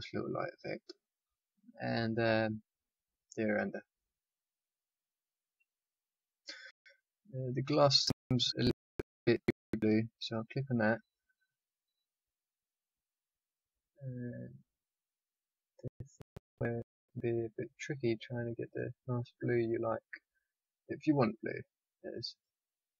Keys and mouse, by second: 2.0-3.7 drag, 9.9-12.9 drag, 16.7 click, 21.0-22.4 drag.